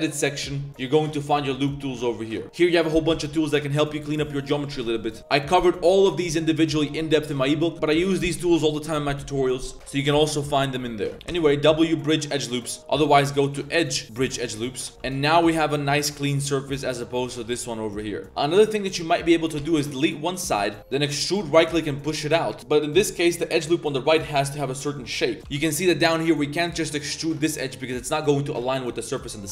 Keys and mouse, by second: 4.1 click, 4.9 middle click, 11.1 2, 11.1 w, 11.3 w, 13.3 click, 13.8-14.3 drag, 14.9 middle click, 14.9 z, 14.9 1, 15.8 Tab, 16.3 Tab, 16.7-18.2 typing, 16.8 click, 18.2 ctrl+z, 18.3 click, 18.8 click, 19.3 click, 19.6 x, 20.8 z, 20.9 e, 21.5 g, 24.3 z, 25.4 shift+w, 25.4 b, 25.4 g, 28.6 z, 29.1 click.